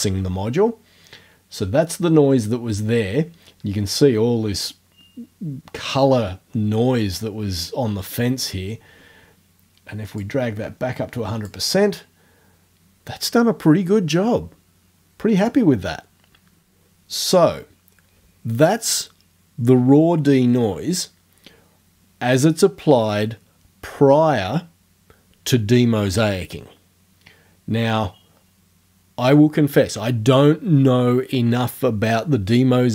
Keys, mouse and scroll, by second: 10.3-11.7 drag.